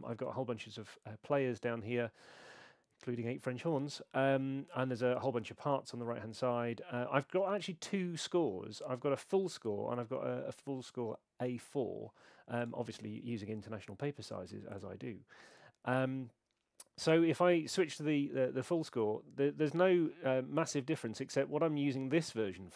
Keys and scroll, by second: 13.4 super+2.